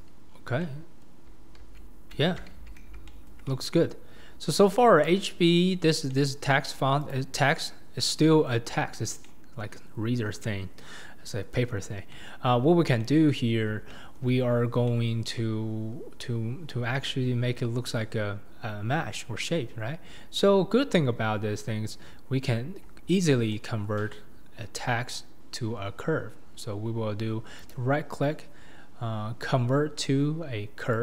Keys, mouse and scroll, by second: 0.0 click, 0.3-0.6 scroll down 5, 0.6-1.3 middle drag, 1.3-1.6 scroll up 3, 1.6 alt+z, 2.5 alt+z, 3.1-5.9 shift+middle drag, 5.9 scroll up 2, 6.1-7.1 middle drag, 7.1 click, 7.4-8.8 middle drag, 8.8-9.2 scroll up 3, 9.2-9.9 middle drag, 9.9-10.2 scroll up 3, 10.2 scroll down 1, 10.4 scroll up 1, 10.4-11.7 middle drag, 11.7-12.1 scroll down 2, 12.1-12.6 middle drag, 12.6-13.0 scroll down 1, 13.0-13.6 middle drag, 13.6-13.9 scroll down 1, 13.9-14.4 shift+middle drag, 14.4-14.9 scroll down 4, 14.9-22.4 middle drag, 22.4-23.5 scroll up 3, 23.6-31.0 shift+middle drag.